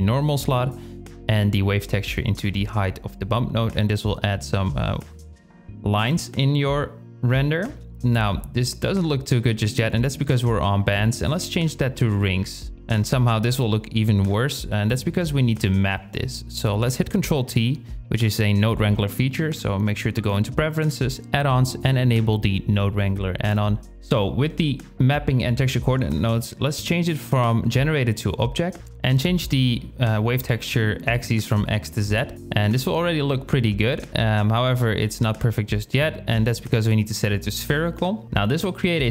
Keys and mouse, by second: 1.2-2.6 drag, 4.2 shift+a, 8.0-9.7 drag, 14.1 shift+a, 16.2 ctrl+t, 17.1 shift+click, 18.2-19.0 drag, 25.1-27.9 drag, 28.2-28.8 drag, 32.7-34.4 drag, 34.7-35.5 drag, 36.0-36.9 drag.